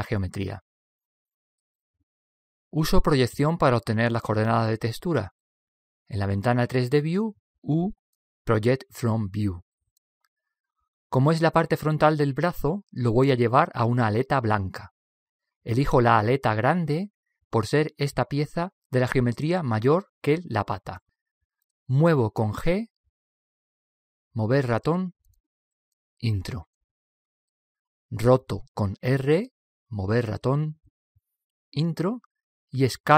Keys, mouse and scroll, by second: 1.5 KP_1, 8.0 u, 23.0 g, 29.5 r.